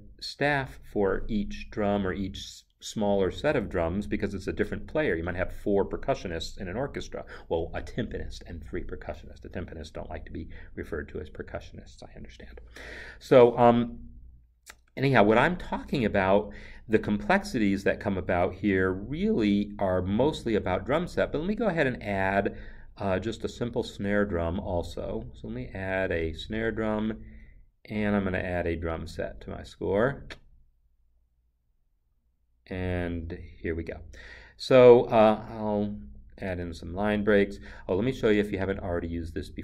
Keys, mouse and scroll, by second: 20.2 Return, 20.3 double click, 23.4 double click, 26.5 double click, 29.8 click, 29.9 double click, 32.4 double click, 33.4 click, 34.5-35.9 scroll, 35.9 click, 36.4 Return.